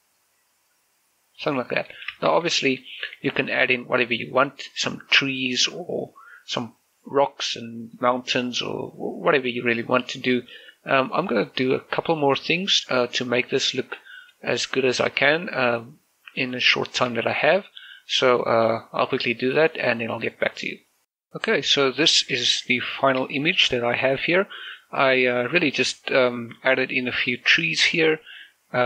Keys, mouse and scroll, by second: 1.8 scroll down 1, 2.2 shift+space, 2.7 shift+middle click, 2.9 scroll up 1, 3.3 shift+middle click, 21.8 click, 21.9 shift+middle click, 22.6 scroll up 1, 22.9 shift+middle click, 23.4 scroll down 1, 23.8 shift+middle click, 26.9 middle click, 27.3 scroll up 1, 28.3 middle click.